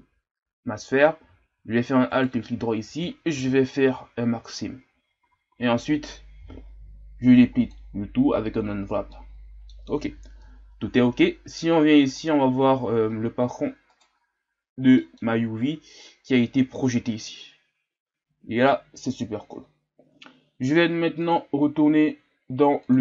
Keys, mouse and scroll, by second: 2.1 alt+right click, 4.6 ctrl+e, 5.2 a, 5.5 a, 7.8 u, 8.7 scroll down 3, 9.1-11.0 middle drag, 11.0-12.3 ctrl+scroll down 4, 12.3 click, 13.9-14.9 right drag, 14.9 middle click, 15.3-19.8 scroll up 2, 19.8-21.3 scroll up 3, 21.3-23.0 drag.